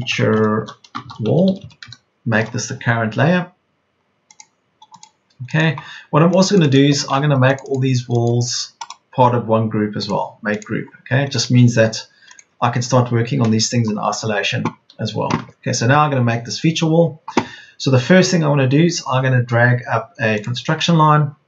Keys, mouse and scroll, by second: 0.0-1.6 typing, 1.7 Return, 14.8 Escape.